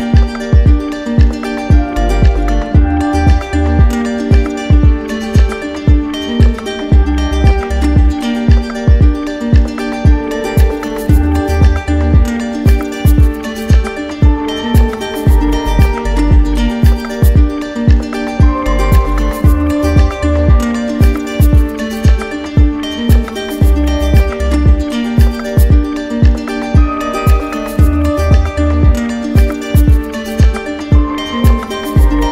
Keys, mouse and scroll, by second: 0.4 alt+click, 1.0 click, 15.5 click, 23.7 click, 24.5 click, 24.8 right click, 25.8 right click, 27.5 right click, 28.8 right click, 29.0 ctrl+z, 31.0 click, 31.7 click.